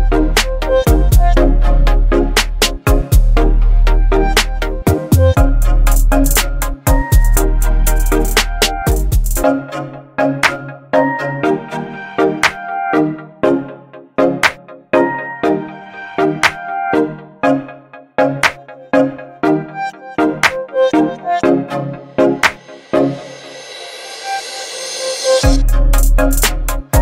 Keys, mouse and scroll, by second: 6.3 click, 7.8 right click, 8.5 click, 11.2-17.4 shift+drag, 25.0 alt+scroll up 1, 25.5-26.1 click, 25.9 space, 26.0 space, 26.4-27.0 shift+drag.